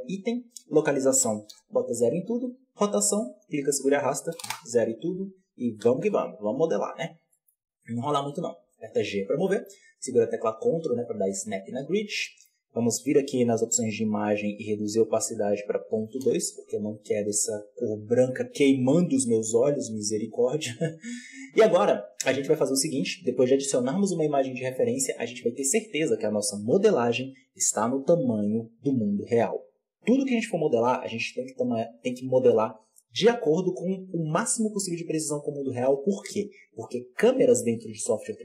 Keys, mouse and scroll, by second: 0.1-5.7 drag, 5.7 KP_7, 6.4-6.9 scroll up 9, 6.9 scroll down 1, 7.2-8.5 shift+middle drag, 8.5 g, 12.1-13.5 shift+middle drag, 13.5-19.3 drag, 19.3 middle click, 19.3-20.0 scroll up 1, 20.0 scroll down 3.